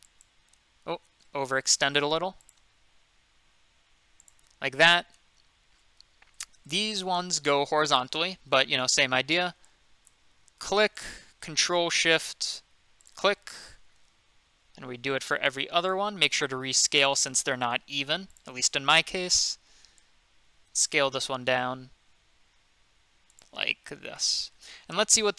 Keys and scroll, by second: 1.1 ctrl+z, 1.8 ctrl+z.